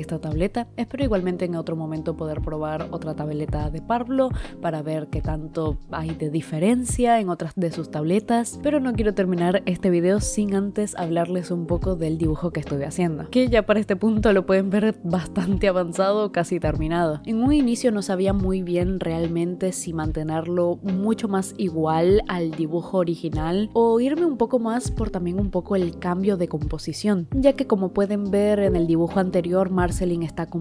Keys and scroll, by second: 0.9 ctrl+z, 2.3 space, 2.5 space, 2.6 i, 4.5-7.2 typing, 8.6 i, 8.9 space, 9.1 space, 11.2-12.4 typing, 17.0 i, 21.5 ctrl+z, 22.4 i, 22.6 i, 24.2 i, 25.1 i, 25.9 ctrl+z, 26.7 ctrl+z, 26.8 ctrl+z, 27.4-30.6 typing.